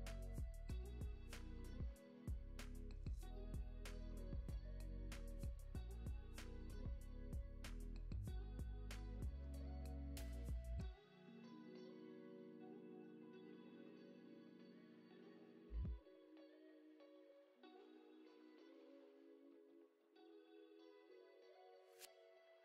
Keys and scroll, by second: 0.3 space, 0.6 super+s, 10.3 space, 17.5 space, 17.8 super+s.